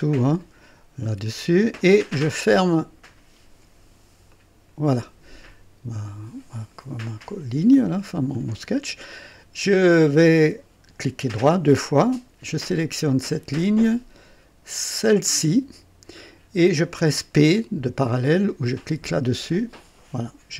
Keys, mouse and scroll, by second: 1.0 click, 4.3 click, 8.3 right click, 11.2 right click, 12.7 click, 14.8 click, 19.3 p.